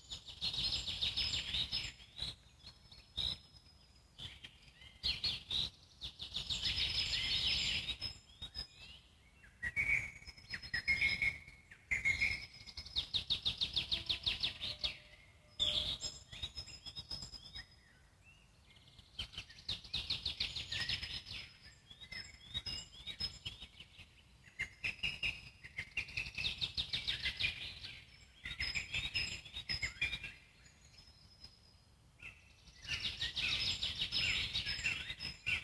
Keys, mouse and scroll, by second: 3.1 alt+middle click, 3.8 click, 4.5-6.5 alt+middle drag, 7.7 ctrl+z, 7.9 ctrl+z, 8.1 ctrl+z, 8.6 alt+middle click, 9.6 click, 10.0 alt+middle click, 10.7-12.6 drag, 12.6-15.1 alt+middle drag, 15.1-21.8 drag, 21.8-25.0 alt+middle drag, 25.0-26.9 drag, 26.9 scroll up 1, 27.2 alt+middle click, 27.7-29.3 drag, 29.3 alt+middle click, 30.0 click, 30.9 alt+middle click, 31.6-35.6 drag.